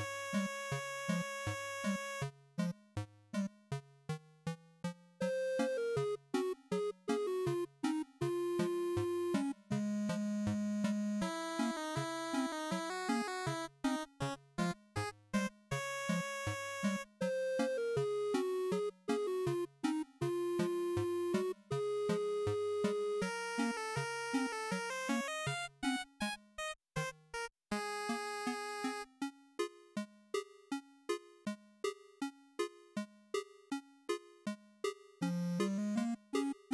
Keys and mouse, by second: 0.9-3.3 drag, 5.6-10.4 drag, 12.6 ctrl+shift+click, 18.3-20.5 drag, 20.5 shift+right click, 23.2 z, 24.5 click, 26.3 ctrl+shift+click, 26.8-29.4 drag.